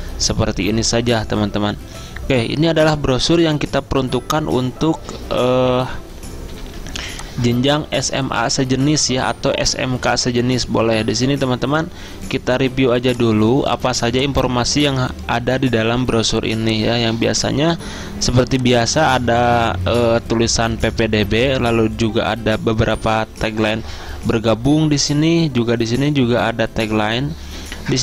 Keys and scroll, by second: 6.6 z.